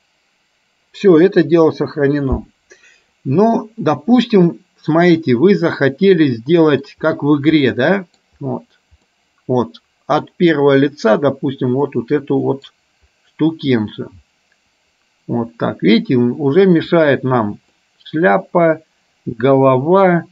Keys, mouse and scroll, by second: 5.7-7.0 middle drag, 7.8 middle click, 9.3-12.9 middle drag.